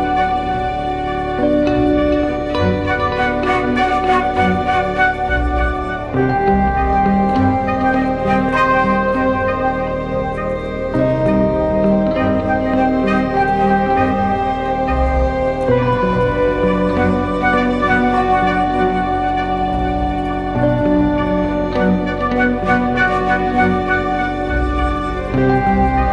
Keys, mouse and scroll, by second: 19.8 alt+click.